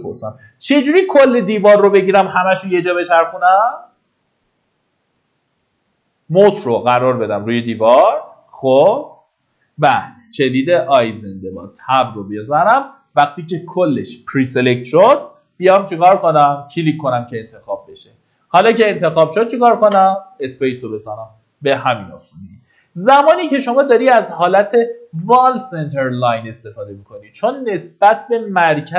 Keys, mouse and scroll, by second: 12.1 Tab, 16.8 click, 20.2 space, 21.1 click, 22.0-22.9 scroll down 1, 22.9-24.2 middle drag, 28.0-28.9 scroll up 1.